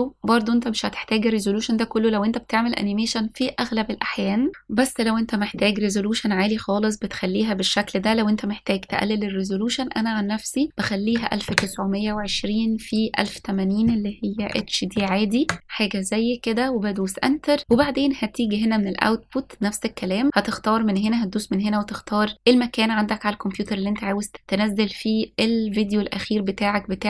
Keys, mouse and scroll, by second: 8.5-13.8 drag, 14.1-15.6 drag, 19.2-21.8 scroll down 3, 21.8 click.